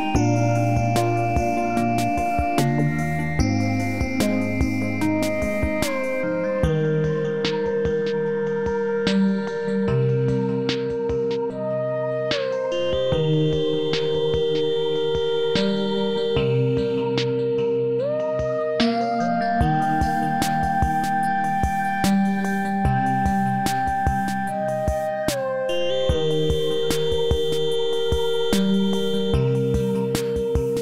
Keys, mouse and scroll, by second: 2.6-3.6 alt+click, 3.6 scroll up 1, 3.9 alt+click, 5.6 scroll down 1, 5.9-6.5 alt+click, 6.5 space, 9.5 alt+right click, 9.8 alt+middle click, 10.2 alt+click, 12.6 scroll down 1, 14.2 click, 21.3 h, 22.1 click, 24.4-25.5 scroll down 1, 25.5-26.8 drag.